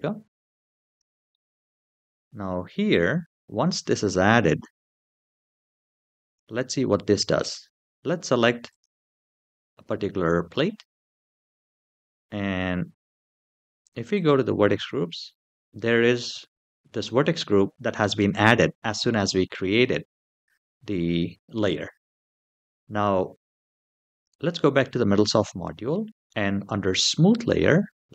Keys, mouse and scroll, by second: 1.1-1.4 shift+middle drag, 3.4-4.1 scroll down 2, 4.7-6.0 scroll down 2, 6.0 click, 6.9-7.4 middle drag, 8.4 click, 13.9 click, 23.9 click, 25.4-26.9 scroll down 2, 27.9-28.1 drag.